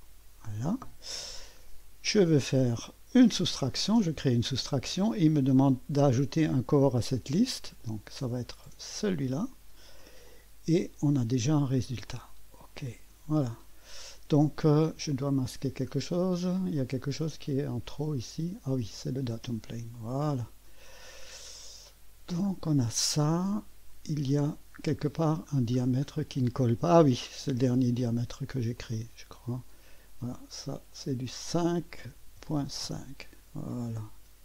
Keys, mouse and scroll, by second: 0.0 click, 2.1 click, 3.1 click, 7.8 click, 8.9 click, 10.3 click, 12.1 click, 13.6-14.6 drag, 15.6-16.8 scroll, 15.7 middle click, 16.8-17.8 drag, 19.0 click, 19.4 space, 20.0 click, 21.3 scroll up 1, 22.1 scroll down 1, 22.9-24.6 drag, 26.5 click, 28.8 click, 29.0 click, 30.9 click, 31.9-33.1 typing.